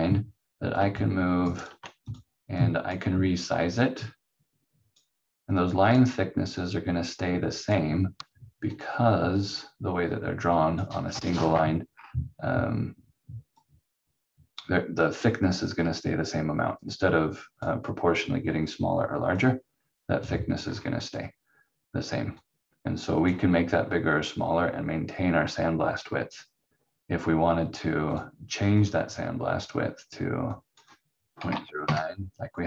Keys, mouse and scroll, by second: 0.7 click, 1.4 ctrl+right click, 11.4-13.5 scroll up 1, 13.5 click, 15.5 scroll down 1, 16.8 click, 20.6 scroll down 1, 22.4 click, 28.1 click, 31.1-32.1 typing.